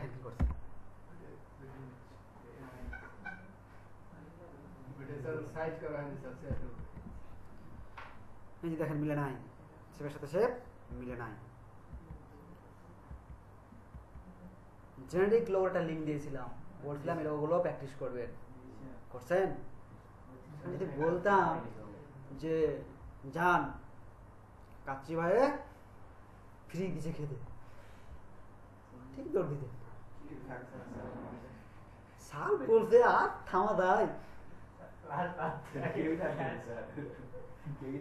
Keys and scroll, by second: 0.3 Left, 6.9 Right, 10.9 Right, 11.9 Right, 13.0 Right, 13.9 Right.